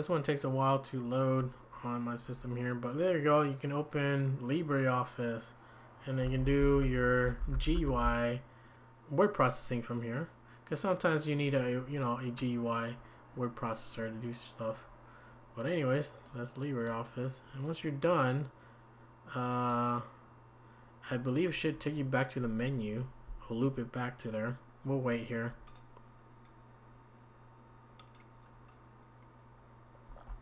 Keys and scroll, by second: 6.0-8.5 typing.